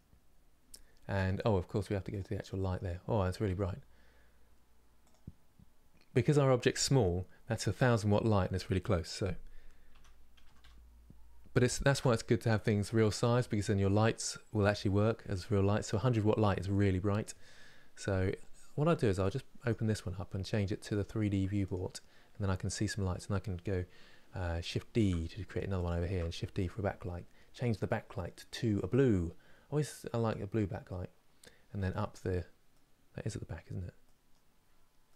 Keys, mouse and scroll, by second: 0.8-1.8 middle drag, 1.8 click, 2.1-3.1 middle drag, 3.1 g, 19.0-24.7 drag, 24.7 shift+d, 25.7 shift+d, 28.2 click, 30.0-34.8 drag, 34.8-35.1 middle drag.